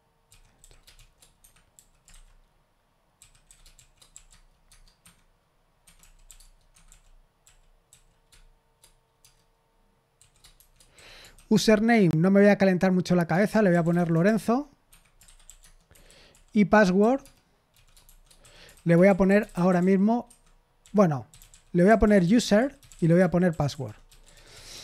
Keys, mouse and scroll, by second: 0.0-4.6 typing, 4.6 Tab, 5.0 Escape, 5.8 Escape, 6.0-7.8 typing, 6.3 Tab, 9.2-11.8 typing, 13.2-24.8 typing, 14.8 Escape, 15.9 Escape.